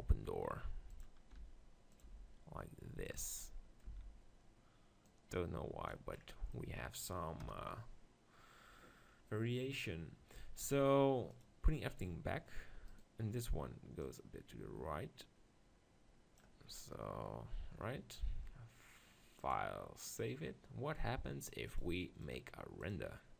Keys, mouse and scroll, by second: 1.0-2.8 drag, 1.5 r, 2.0 g, 3.2 click, 3.4 middle click, 3.9 z, 6.8 click, 7.4 KP_0, 11.3-12.5 drag, 12.9-14.7 drag, 12.9-15.6 right drag, 15.6 click, 16.7-17.7 scroll up 1, 17.7-19.7 middle drag, 19.7-21.3 drag, 21.7 click, 23.1-23.3 drag.